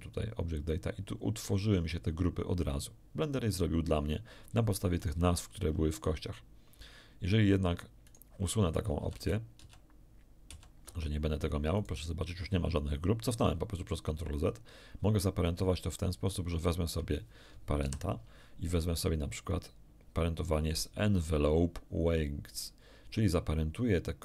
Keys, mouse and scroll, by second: 4.9 right click, 8.0 right click, 8.9 ctrl+z, 9.1 ctrl+z, 9.5 ctrl+z, 11.7 right click, 15.9 shift+right click, 17.8 ctrl+p.